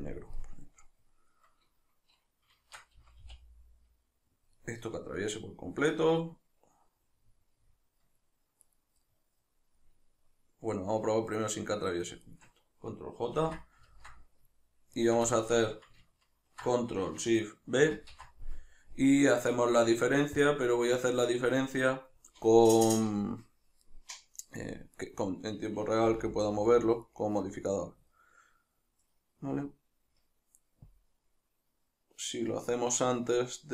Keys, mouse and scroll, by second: 2.7 shift+Tab, 3.0-4.5 middle drag, 3.0 g, 4.5 click, 4.6-8.7 middle drag, 8.7 right click, 9.1-12.3 middle drag, 12.3 shift+right click, 13.4 ctrl+j, 13.9-15.0 ctrl+middle drag, 15.0 shift+right click, 15.3-25.0 shift+middle drag, 17.9 ctrl+shift+b, 25.0 right click, 26.1 g, 27.2 right click, 27.7 right click, 28.5-30.9 middle drag, 30.9-33.7 drag.